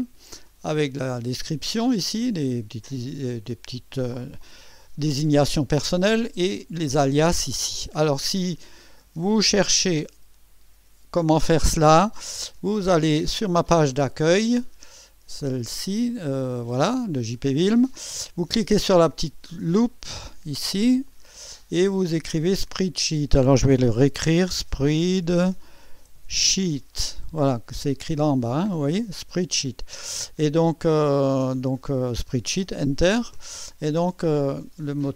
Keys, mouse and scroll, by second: 13.4 click, 15.4 click, 21.0 click, 21.9 click, 24.1-27.1 typing, 32.6 Return, 34.0-35.0 scroll down 3.